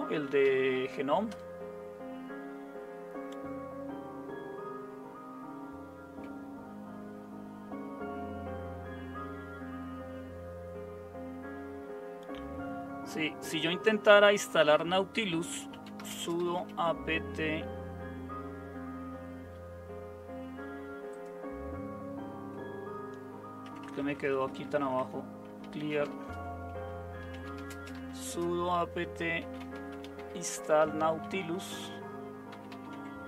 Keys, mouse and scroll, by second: 0.0-1.3 typing, 15.3-17.0 typing, 23.6-33.2 typing.